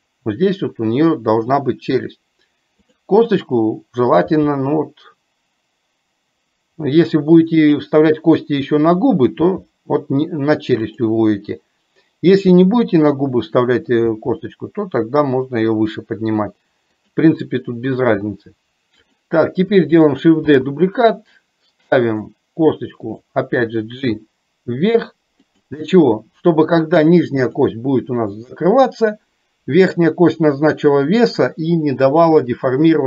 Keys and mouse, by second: 19.2 click, 23.0 click, 27.5 click.